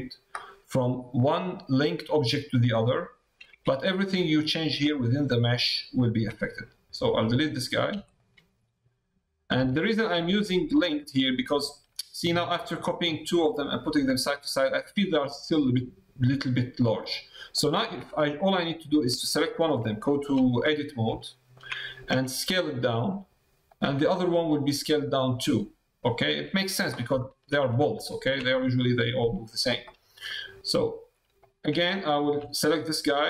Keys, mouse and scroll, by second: 3.5 Tab, 6.2 Tab, 6.6 middle click, 8.6 middle click, 9.3 middle click, 9.7 shift+middle click, 11.0 middle click, 11.5 shift+middle click, 13.3 middle click, 14.1 middle click, 14.8 middle click, 17.6 click, 17.9 Tab, 18.6 middle click, 19.9 shift+middle click, 20.1 click, 20.4 click, 21.2 shift+click, 23.8 Tab, 24.0 middle click, 25.0 middle click, 25.6 middle click, 27.1 shift+middle click, 27.6 middle click, 28.0 shift+middle click, 28.6 middle click, 29.9 middle click, 31.8 shift+middle click.